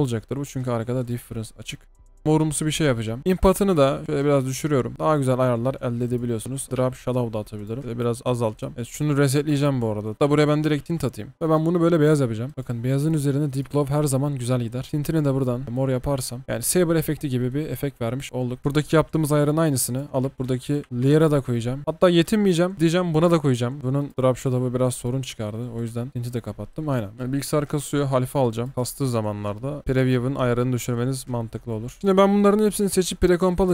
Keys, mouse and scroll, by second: 12.5 double click, 13.7 double click, 21.8 typing, 27.6 double click, 28.7 space, 31.0 space, 32.0 right click.